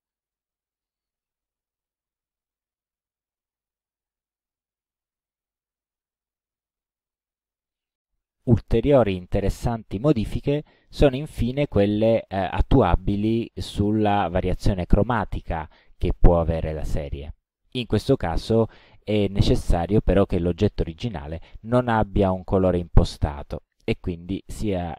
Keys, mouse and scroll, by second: 0.0 click, 0.8 click, 5.0 click, 7.5 click, 23.1 right click.